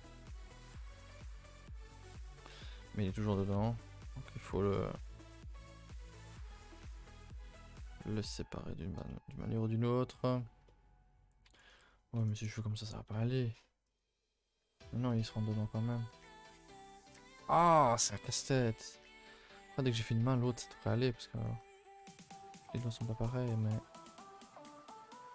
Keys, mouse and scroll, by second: 0.8 a, 1.9-3.5 typing, 4.0 click, 4.5 a, 4.6 middle click, 4.9 a, 5.1 a, 5.4 2, 5.8 click, 7.0-12.3 middle drag, 12.3 right click, 12.5 a, 14.0 u, 14.8 ctrl+z, 15.0 ctrl+z, 15.4 ctrl+z, 16.1 ctrl+z, 16.3 ctrl+z, 16.6 ctrl+z, 16.9 ctrl+z, 17.2 ctrl+z, 17.5 ctrl+z, 17.8 ctrl+z, 18.1 ctrl+z, 18.4 ctrl+z, 18.6 ctrl+z, 18.8 ctrl+z, 19.1 ctrl+z, 20.4 ctrl+z, 20.6 ctrl+z, 21.6 a, 21.7 a, 21.8-23.6 middle drag, 23.6 scroll down 1, 23.7 a, 23.9 a, 24.1-25.2 middle drag, 25.2 alt+click.